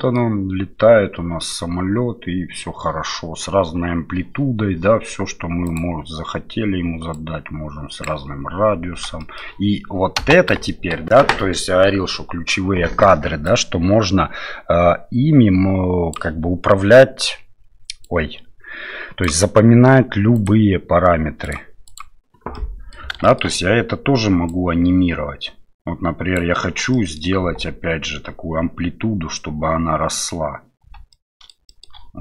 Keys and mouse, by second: 5.7 click, 7.2 click, 9.2 shift+middle click, 10.2 space, 10.7 shift+middle click, 13.4-16.1 drag, 18.1-19.2 drag, 20.3-22.0 right drag, 22.5 middle click, 23.2 shift+middle click, 24.5-26.3 drag, 26.9 middle click, 27.4 space, 30.8 space, 31.1 middle click, 31.7 shift+middle click.